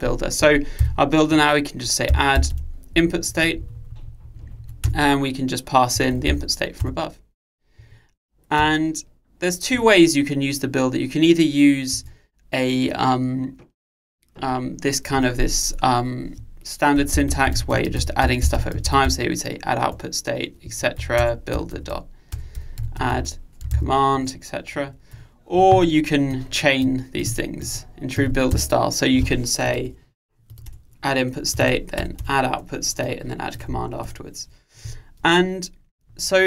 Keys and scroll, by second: 5.0 Return, 20.0 Return.